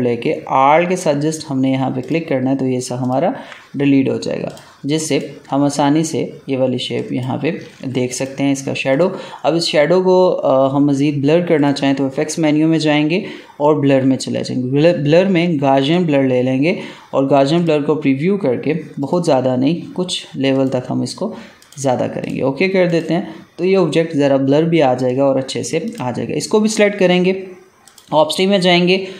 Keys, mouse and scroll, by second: 3.0 alt+click, 7.6 ctrl+z, 8.0 click, 8.1 click, 11.5 click, 15.7 click, 25.0 click, 25.8 click.